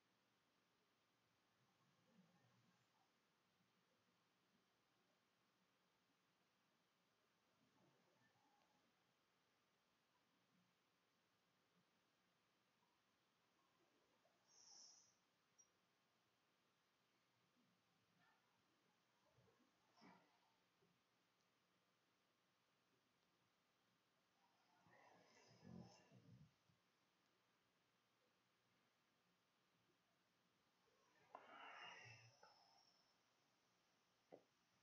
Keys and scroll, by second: 0.0 Tab, 1.5 Tab, 2.1-3.7 typing, 3.9 Delete, 4.9 Delete, 9.5 shift+Up, 9.7-15.3 typing, 17.1 ctrl+shift+z, 17.2 ctrl+shift+x, 17.3 ctrl+shift+d, 18.0 ctrl+shift+s, 19.2 ctrl+4.